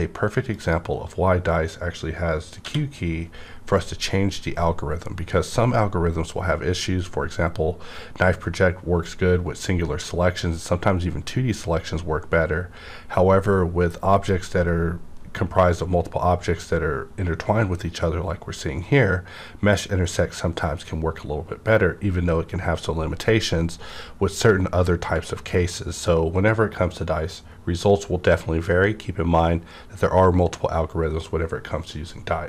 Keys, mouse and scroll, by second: 0.5 click, 0.5 click, 1.1 scroll up 1, 1.6-2.6 scroll down 1, 2.6 q, 3.9 scroll down 1, 4.2 scroll up 1, 8.3-9.4 scroll down 1, 9.4 scroll, 9.6 scroll up 1, 11.0 scroll up 1, 14.1 click, 14.2 click, 14.2-14.7 scroll up 1.